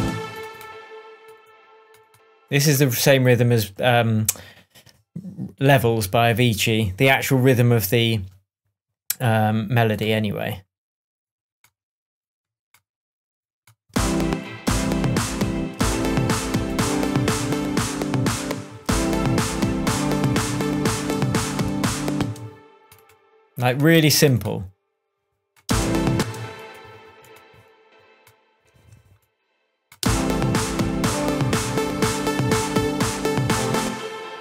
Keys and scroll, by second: 7.0 shift+Tab, 13.9 space, 18.4 space, 19.9 super+space, 20.2 super+d, 22.1 super+space, 23.0 space, 25.6 space, 28.8 BackSpace, 30.0 space, 33.8 space.